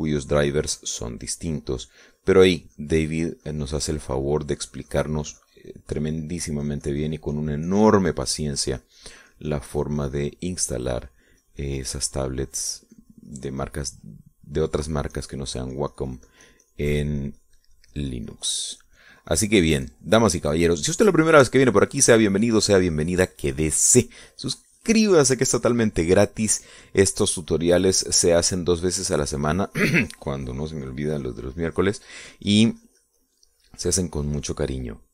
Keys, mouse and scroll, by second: 8.0 shift+click, 8.5-15.9 shift+drag, 16.1 middle click, 17.0-28.1 drag, 28.4 middle click, 29.1-35.1 drag.